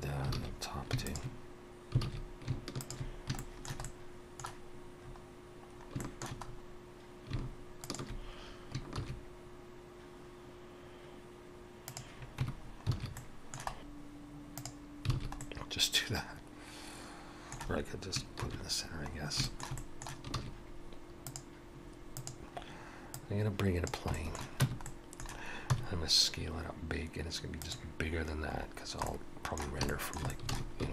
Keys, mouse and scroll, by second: 0.3 scroll down 1, 0.3 alt+a, 1.1 alt+shift+click, 2.0 alt+a, 2.8 alt+shift+click, 3.4 shift+middle click, 3.8 middle click, 5.0 scroll up 1, 5.7 scroll up 1, 6.0 shift+middle click, 6.4-7.3 scroll up 2, 7.8 alt+shift+click, 9.0 shift+e, 12.4 Tab, 12.6-13.0 scroll down 3, 13.0 alt+a, 13.2 middle click, 13.7-14.1 scroll down 1, 13.7 shift+s, 15.1 alt+a, 15.4 middle click, 18.4 shift+c, 19.1 scroll up 1, 19.4 shift+middle click, 19.8 middle click, 20.3 shift+a, 22.6-23.1 scroll down 2, 23.1 click, 24.1 shift+middle click, 24.6 Tab, 24.8 middle click, 25.7 s, 28.5-29.0 scroll up 3, 29.0 middle click, 29.9 shift+middle click, 30.3 middle click, 30.5 alt+a.